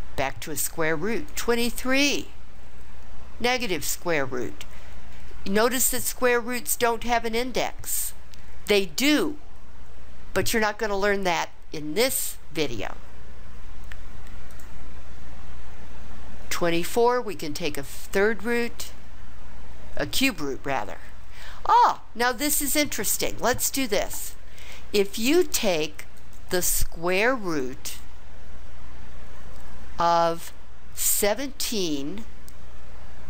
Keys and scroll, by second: 31.0 1, 31.8 7.